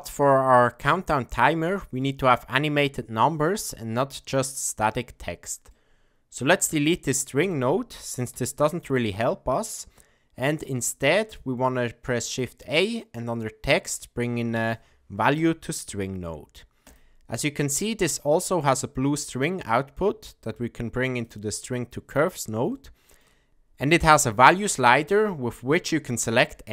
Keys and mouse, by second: 0.6-1.4 ctrl+middle drag, 1.7 shift+middle drag, 5.8 middle click, 7.4 click, 8.3 x, 10.4 shift+a, 18.2-21.2 drag, 22.8 shift+middle click, 24.3-26.7 drag.